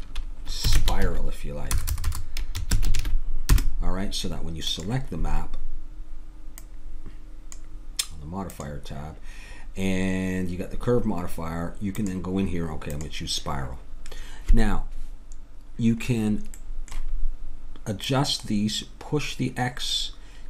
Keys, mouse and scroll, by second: 1.8 BackSpace, 2.1 BackSpace, 5.4-6.4 drag, 6.6-8.4 drag, 8.5-14.6 drag, 16.0-18.0 middle drag, 18.0-19.9 drag.